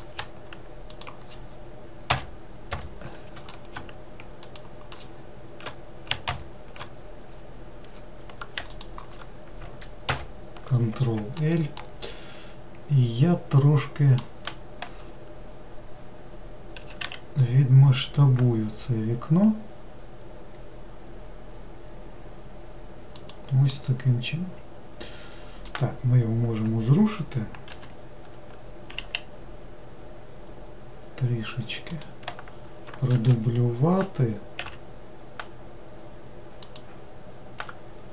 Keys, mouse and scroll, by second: 0.9 shift+click, 2.1 shift+l, 2.7 shift+l, 4.4 shift+click, 6.3 shift+l, 8.6 shift+click, 10.0 ctrl+l, 11.8-14.9 middle drag, 16.8 s, 23.7-26.9 middle drag, 27.7 g, 33.1 shift+d.